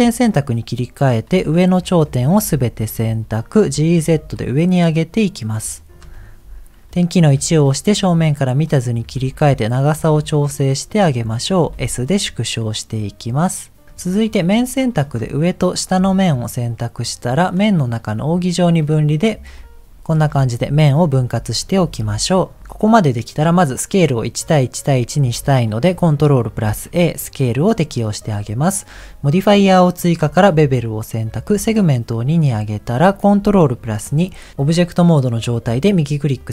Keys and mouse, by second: 0.7 click, 2.4 shift+middle click, 3.6 g, 7.4 KP_1, 9.0 g, 11.6 s, 13.9 middle click, 14.8 middle click, 15.8 shift+click, 17.5-19.1 drag, 20.8 shift+middle click, 22.1 KP_1, 26.6 ctrl+a, 31.4 click, 33.7 ctrl+2.